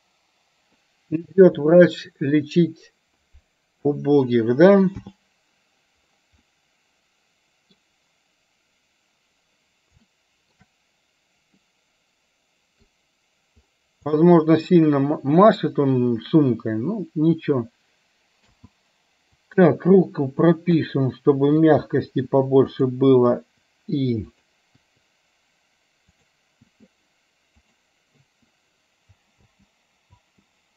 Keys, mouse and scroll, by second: 0.5 middle click, 1.4 KP_1, 5.1 n, 6.4-7.9 middle drag, 10.2 shift+middle click, 11.7-12.9 middle drag, 14.3 middle click, 18.5 space, 19.6 click, 20.9 i, 21.6 click, 22.2 i, 22.8 click, 23.5 i, 24.4 click, 24.9 i, 26.8 i, 27.7 click, 28.3 i, 29.5 space, 30.0 space.